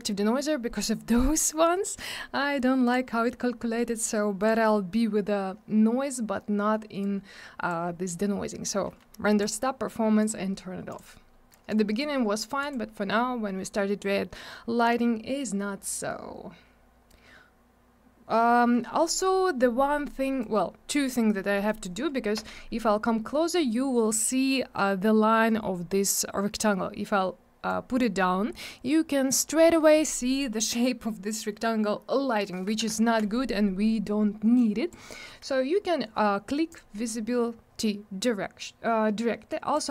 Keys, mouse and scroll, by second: 0.0-1.0 scroll up 1, 1.4 scroll down 1, 2.8 click, 4.4 click, 7.0 click, 9.4 click, 10.2 click, 10.8 click, 11.7 click, 12.6 click, 18.5-19.4 scroll up 1, 20.4 click, 21.8 right click, 22.6 scroll up 1, 24.0 scroll down 1, 24.7 scroll up 1, 27.6 click, 33.0 ctrl+z, 34.5 click, 36.7 click, 39.7 click.